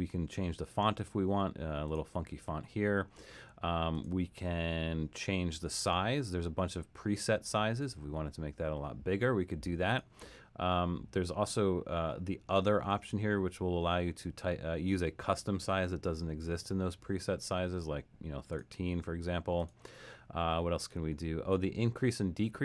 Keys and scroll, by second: 16.1-17.0 typing, 18.1-18.8 typing.